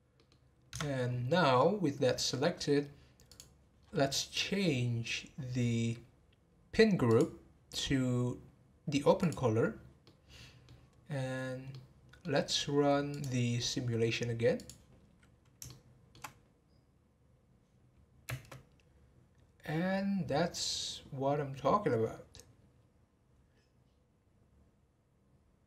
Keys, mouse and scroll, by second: 0.1 middle click, 0.7 Tab, 1.3-3.3 middle drag, 3.3 click, 3.8-4.4 scroll down 12, 5.6-7.1 scroll down 9, 7.1-9.7 drag, 9.7 scroll down 2, 10.0-13.1 middle drag, 13.1 click, 14.6 click, 15.6-18.3 shift+middle drag, 18.3 space.